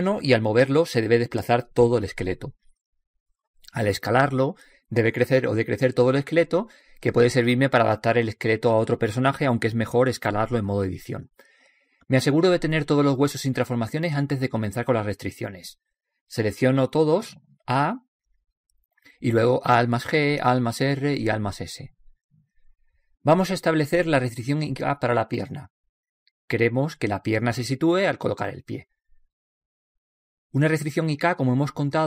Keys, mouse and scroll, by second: 1.4-1.8 middle drag, 1.4 right click, 1.7 g, 5.8 s, 8.1 middle click, 8.5-10.5 middle drag, 10.7-15.1 middle drag, 15.3 a, 15.7 a, 16.8-18.2 middle drag, 18.4 middle click, 18.9 middle click, 20.8 alt+g, 21.2 alt+r, 21.9 alt+s, 23.5 middle click, 23.7 middle click, 23.9 middle click, 24.1 middle click, 24.3 middle click, 25.3-26.7 middle drag, 28.9 middle drag, 29.1-30.3 middle drag.